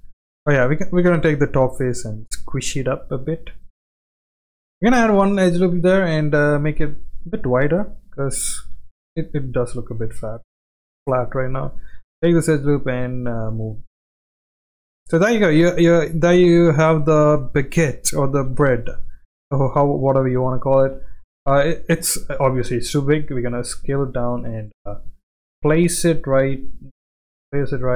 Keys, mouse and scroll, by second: 0.0 click, 0.1 ctrl+z, 0.1 middle click, 0.8 click, 1.5 g, 3.2 middle click, 4.0 click, 4.5 ctrl+r, 5.7 s, 6.9 middle click, 8.0 middle click, 8.7 s, 9.8 middle click, 10.6 click, 11.7 alt+click, 12.4 g, 13.8 click, 14.2 middle click, 14.4 scroll down 1, 14.5 Tab, 15.0 middle click, 15.5 click, 15.8-16.3 right drag, 16.6-17.0 middle drag, 17.8-18.1 middle drag, 18.6 g, 19.9 g, 21.8-22.3 middle drag, 21.8 g, 22.5 s, 25.0 g, 25.5 g, 26.9-27.7 middle drag, 27.7 g.